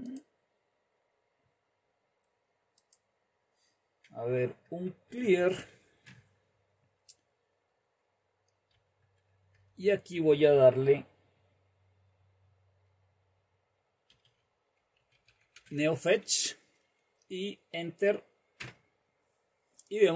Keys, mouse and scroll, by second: 0.0-1.2 drag, 2.9-4.2 drag, 4.2-6.4 typing, 8.7 typing, 13.9-16.2 typing, 18.6 Return.